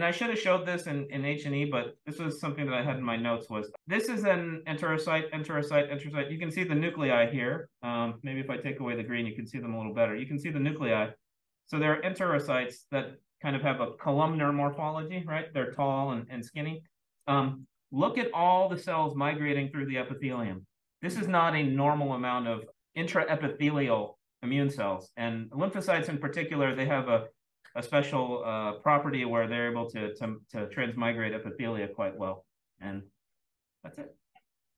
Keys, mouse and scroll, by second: 8.9 click.